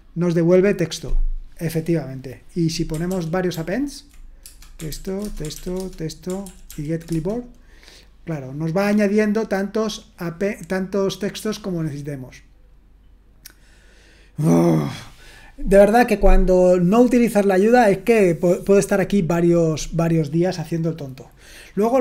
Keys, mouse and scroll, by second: 3.1 ctrl+p, 3.5 ctrl+p, 4.4 Return, 4.9 ctrl+p, 5.2 Return, 5.5 ctrl+p, 6.5 Return, 6.7 ctrl+p.